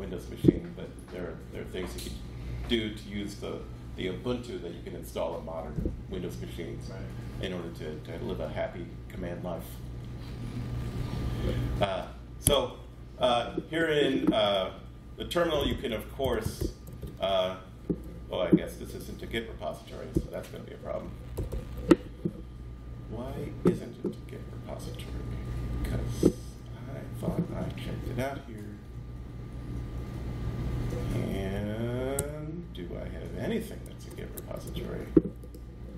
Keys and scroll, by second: 12.4 Escape, 15.3-17.0 typing, 20.1 BackSpace, 32.1 super+Tab, 34.3 shift+super+Tab.